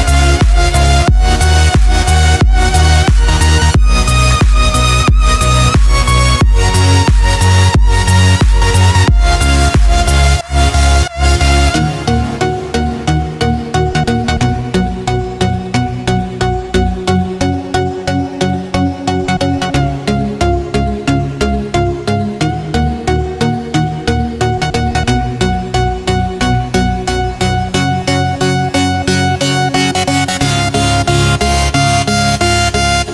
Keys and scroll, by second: 1.6 x, 4.4 z, 8.3 z, 9.7 8, 12.7 x, 13.8 z, 15.0 ctrl+z, 16.1 3, 18.6 z, 19.3 0, 20.1 z, 22.1 1, 24.7 x, 25.0 ctrl+space, 25.2 ctrl+space, 25.8 space, 26.9 z, 31.9 7.